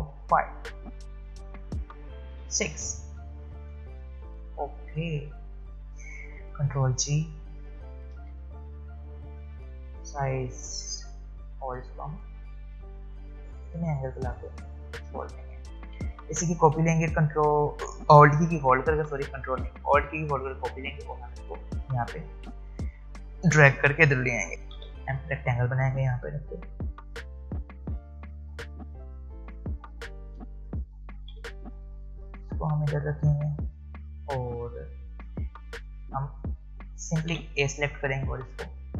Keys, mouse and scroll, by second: 2.3 ctrl+d, 3.4 alt+scroll down 1, 3.9 click, 6.5 ctrl+g, 9.4 alt+shift+click, 10.7-11.1 alt+scroll down 1, 11.9-15.5 drag, 15.5-16.0 alt+scroll down 1, 18.0-20.9 alt+drag, 23.1-23.9 scroll up 2, 23.9-24.5 alt+scroll down 1, 24.8-26.9 alt+scroll up 1, 26.9 m, 27.3-31.3 drag, 31.3 v, 32.3-37.3 drag, 37.3 a, 38.4 click.